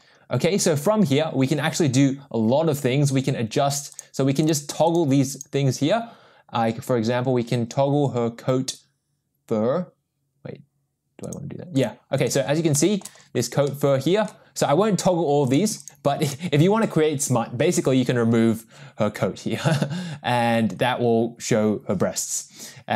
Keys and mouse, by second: 4.1 click, 4.6 click, 5.0 click, 5.5 click, 11.4 click, 11.9 click, 12.7 shift+middle click, 13.7-14.3 middle drag, 16.0 click.